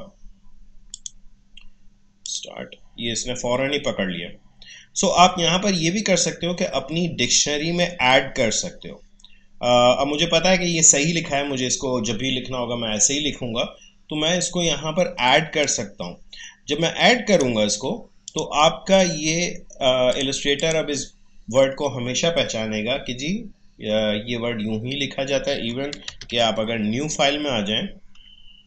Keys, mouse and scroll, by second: 0.9 click, 15.6-18.3 drag, 25.6 click, 26.1 ctrl+n.